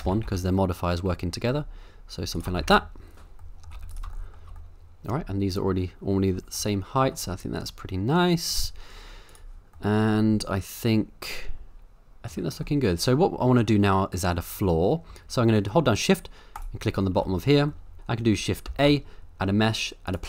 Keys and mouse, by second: 0.0 g, 0.3 z, 2.6 a, 2.7 a, 3.5 middle drag, 3.7 z, 4.2 shift+middle drag, 4.7-5.1 middle drag, 6.6-7.1 shift+middle drag, 7.4-8.5 middle drag, 9.8-12.3 middle drag, 12.7-13.4 middle drag, 14.0 middle click, 16.6 shift+right click, 17.8 middle drag, 18.7 shift+a.